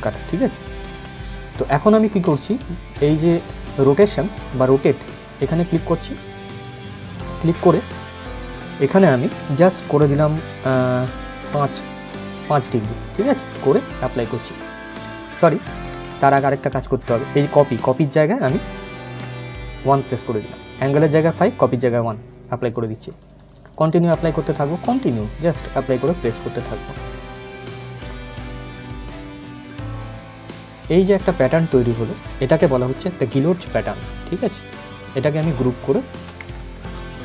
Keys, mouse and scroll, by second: 0.1 click, 4.6 click, 8.1 click, 13.7 click, 15.7 ctrl+z, 17.6 click, 22.0-32.9 drag, 33.1 ctrl+g, 33.7 click, 35.0 alt+shift+click, 36.2 ctrl+z.